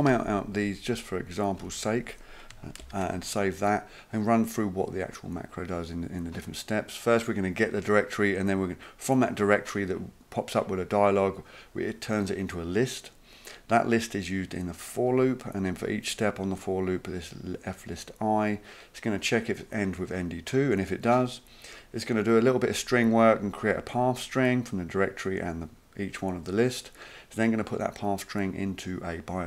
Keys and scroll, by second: 0.0 typing, 1.6 typing, 2.8 ctrl+s.